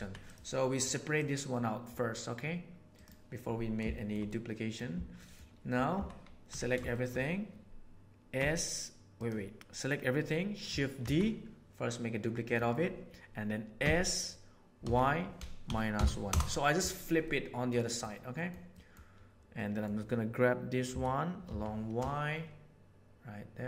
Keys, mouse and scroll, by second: 1.1-2.1 right drag, 2.1 click, 3.9-4.7 shift+middle drag, 5.1 shift+middle click, 5.9 Tab, 6.5 a, 6.8 shift+middle click, 8.3 s, 11.0 shift+d, 13.7 s, 17.2 middle click, 17.8 middle click, 18.2 click, 18.6 click, 19.4 click, 20.8 g.